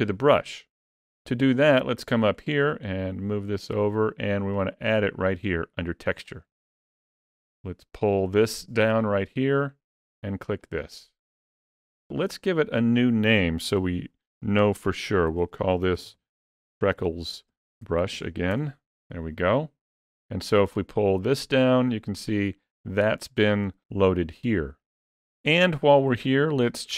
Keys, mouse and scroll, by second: 2.5 middle click, 6.0 click, 13.3 click, 13.9 click, 21.0 click, 24.9 click.